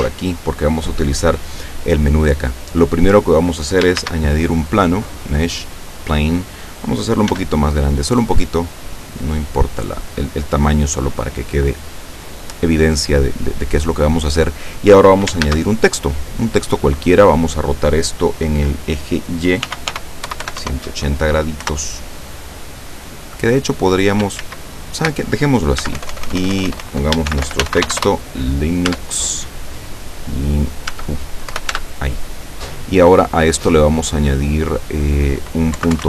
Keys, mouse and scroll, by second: 2.4-3.7 middle drag, 3.7-4.3 scroll up 3, 4.0 shift+a, 5.7 click, 6.5 scroll down 2, 7.4 s, 10.2 click, 10.9 middle click, 11.5 middle click, 14.1-15.2 middle drag, 15.3 shift+middle click, 15.5 shift+a, 16.3 click, 19.4-21.2 typing, 21.7 Return, 24.5 ctrl+z, 25.9 Tab, 26.0 BackSpace, 27.1-28.4 typing, 28.9 Tab, 29.9-30.9 drag, 30.9 Tab, 31.6 BackSpace, 31.8 Tab, 33.7 click, 34.8 click, 35.5-36.0 typing.